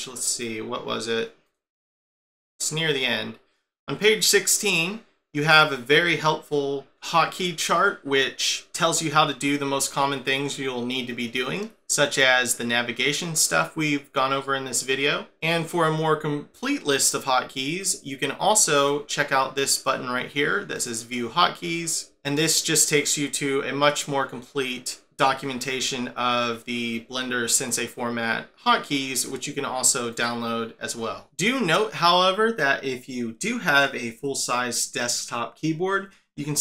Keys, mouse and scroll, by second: 18.7 click.